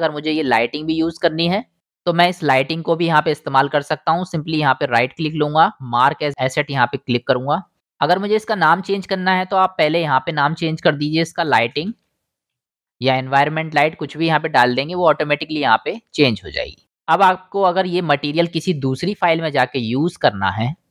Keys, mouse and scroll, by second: 7.8-9.4 drag, 13.2-18.0 drag, 19.3-20.9 drag.